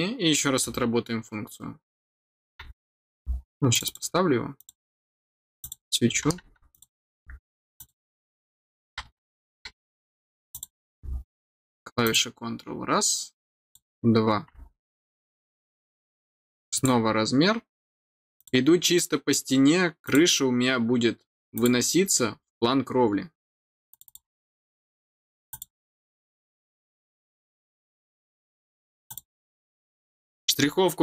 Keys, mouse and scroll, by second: 3.7 click, 3.8 click, 4.5 click, 5.6 click, 6.7 click, 7.7 click, 10.5 click, 12.0 click, 13.6 click, 14.6 scroll down 1, 15.0 middle click, 16.7 click, 18.3 click, 20.0 click, 21.5 click, 23.9 click, 25.5 click, 26.4-26.7 scroll up 2, 29.0 click.